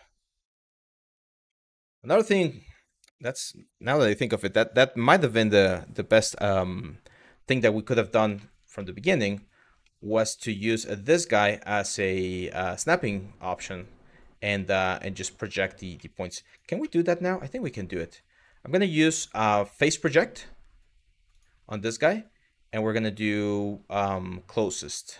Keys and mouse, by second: 1.2 middle click, 7.6 middle click, 8.0 shift+middle click, 8.4 middle click, 9.4 middle click, 10.1 Tab, 10.3 click, 13.3 click, 15.7 middle click, 16.1 click, 16.6 middle click, 17.5-25.1 drag.